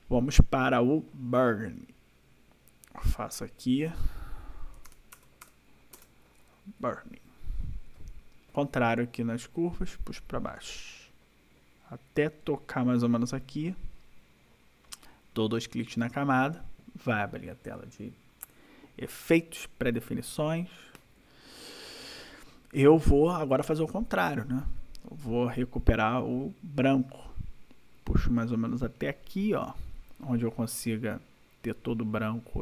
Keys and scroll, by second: 4.5-5.3 typing, 5.9 Return.